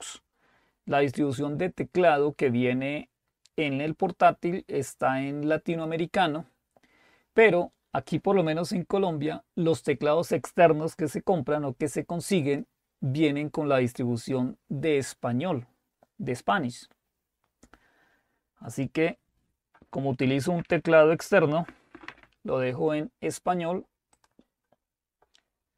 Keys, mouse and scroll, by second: 5.7 click, 12.5 click, 24.2 click.